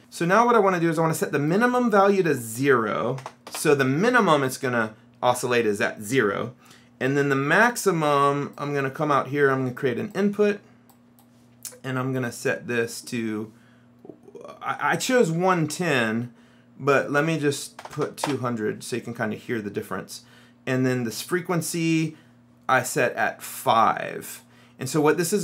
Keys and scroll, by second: 3.3 KP_0, 3.5 Return, 17.3 KP_2, 17.9 KP_0, 18.3 Return.